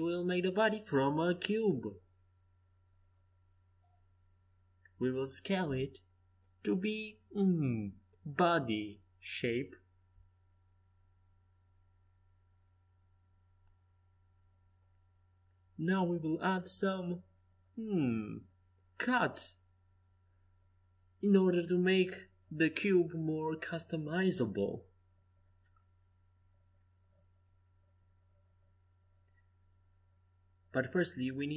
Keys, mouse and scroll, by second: 0.7-3.4 drag, 2.3 z, 3.4 s, 5.9-7.7 drag, 11.0 Tab, 14.4 ctrl+r, 26.1 Escape, 27.3 a, 29.3-31.5 drag, 30.1 c.